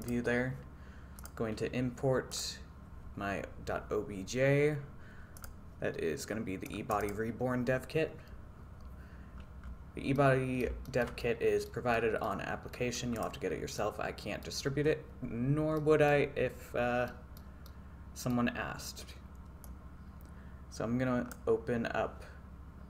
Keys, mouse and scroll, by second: 0.1-1.2 drag, 1.7-7.1 drag, 10.2-10.7 middle drag, 10.9 shift+middle drag, 11.2-11.7 middle drag, 12.0-12.4 middle drag, 12.8 middle click, 13.2 click, 13.8-14.6 middle drag, 15.8 middle click, 17.1 middle click, 17.7-18.3 middle drag, 19.8-21.4 drag.